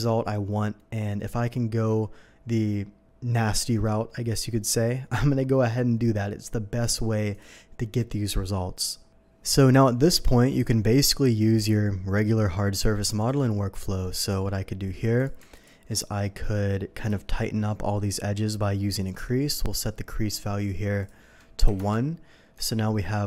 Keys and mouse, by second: 9.3-19.3 drag, 14.3 Tab, 19.1 n, 21.6 KP_1, 21.7 Return, 22.5 Tab.